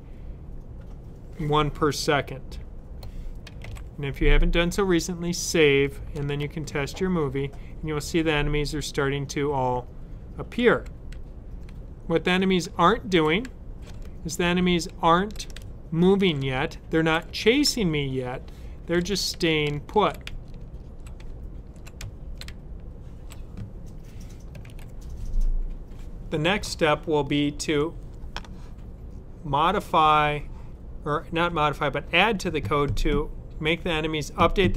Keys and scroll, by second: 3.5 super+s, 11.0 Up, 16.2-17.6 typing, 18.8-22.4 typing, 24.3-25.0 typing.